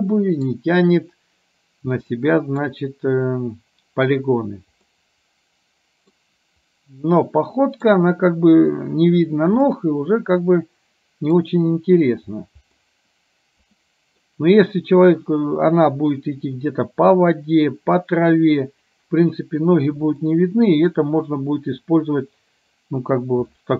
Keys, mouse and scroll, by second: 0.1 middle click, 2.3 middle click, 5.0-6.2 middle drag, 7.2 middle click, 9.8-11.5 middle drag, 13.0-14.5 middle drag, 20.3 middle click, 23.6 middle click.